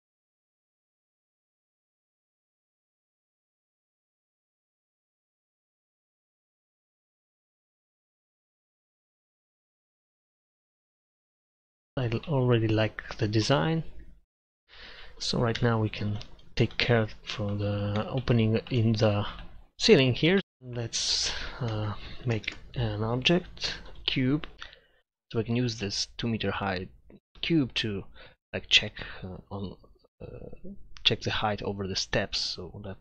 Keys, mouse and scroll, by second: 0.1 middle drag, 1.4 middle click, 2.2 middle click, 8.2 middle click, 10.2 middle click, 12.0 middle click, 15.6 KP_Divide, 20.0-20.6 middle drag, 21.2-22.5 drag, 22.5 shift+a, 25.4-26.0 drag, 30.4 middle click, 32.7-33.0 middle drag.